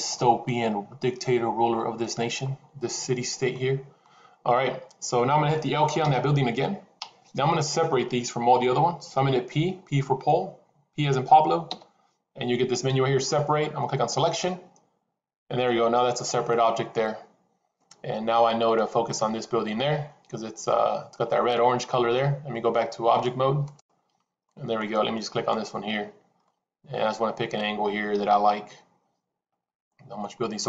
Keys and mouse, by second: 0.0-2.1 middle drag, 3.5 middle click, 5.9 l, 11.6 p, 18.5-21.1 middle drag, 21.5 middle click, 23.1-23.7 drag, 24.4-24.8 middle drag, 25.3-25.9 drag, 26.3-30.2 middle drag, 30.5-30.6 middle drag.